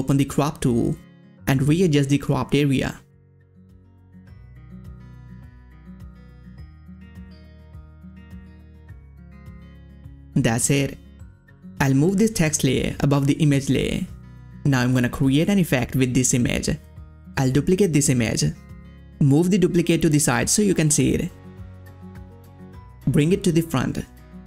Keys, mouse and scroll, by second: 0.9 click, 0.9-3.3 drag, 4.3-10.1 drag, 11.7 ctrl+z, 11.7-14.2 drag, 15.3 click, 15.3 click, 16.2 right click, 17.6-21.6 drag, 21.6 right click, 22.9 click.